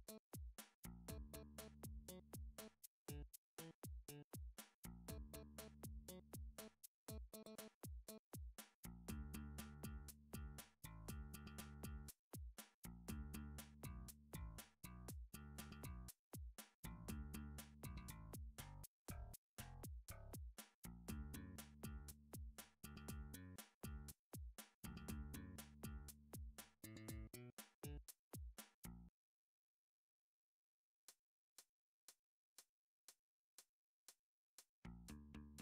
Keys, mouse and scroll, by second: 0.7 click, 1.7 alt+click, 1.9 alt+click, 6.8 g, 8.8 click, 10.1 Tab, 11.2 alt+z, 12.8 middle click, 13.3 3, 13.8 Tab, 14.3 alt+z, 15.5 click, 15.7 Tab, 17.4 g, 18.7 click, 19.2 click, 19.8 g, 20.7 click, 21.0 click, 21.2 g, 22.1 click, 22.5 click, 22.6 g, 23.3 click, 23.5 click, 23.6 g, 24.2 click, 24.4 click, 25.0 g, 25.6 click, 26.0 click, 26.5 click, 26.8 g, 29.8 click, 30.1 click, 30.3 g, 31.0 click, 31.3 click, 31.5 g, 32.0 click, 32.4 click, 33.0 g, 33.8 click, 34.3 click, 34.4 g, 35.0 click, 35.5 click.